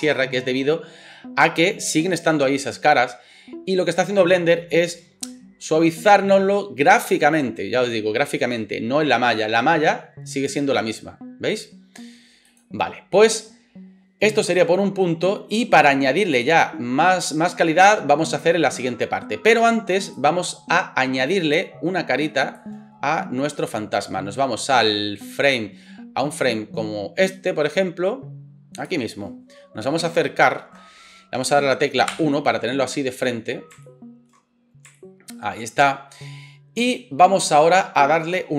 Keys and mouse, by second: 10.5-12.5 middle drag, 12.5 click, 12.6-14.4 middle drag, 14.4-38.5 drag, 32.1 KP_1.